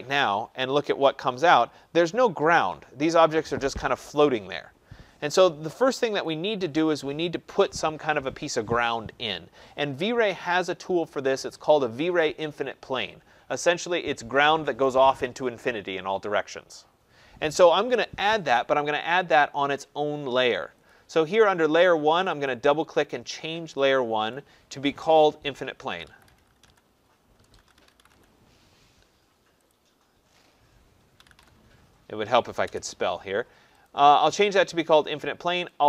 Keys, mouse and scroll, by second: 6.2 click, 20.9 click, 22.3 click, 22.5 click, 24.3 click, 25.7-28.6 typing, 29.7 click, 30.9-32.6 typing, 33.9 click.